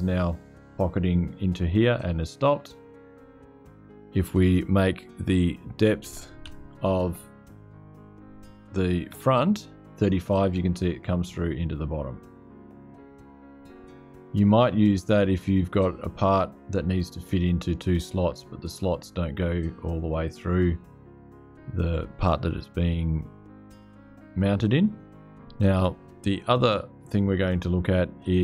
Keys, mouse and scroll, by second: 1.8-3.9 drag, 5.2 click, 6.2 Left, 8.9 3, 10.4 scroll, 12.5-13.3 scroll up 1, 13.6-16.3 scroll.